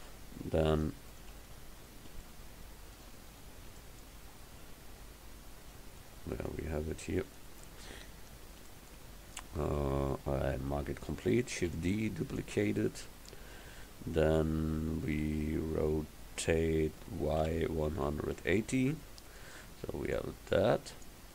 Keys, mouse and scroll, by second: 0.1 KP_7, 2.2 KP_Decimal, 9.7 a, 11.6 shift+d, 12.4-14.8 drag, 17.1 r, 20.2-21.3 drag.